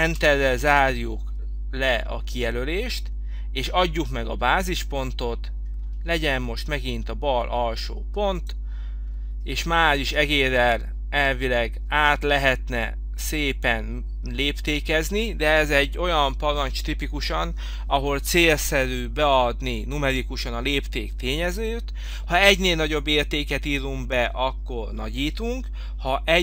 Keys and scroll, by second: 0.5 Return.